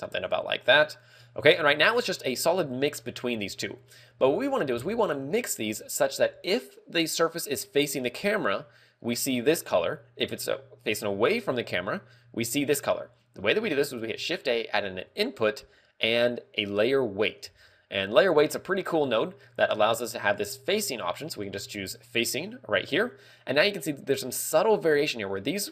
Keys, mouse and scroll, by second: 4.2 click.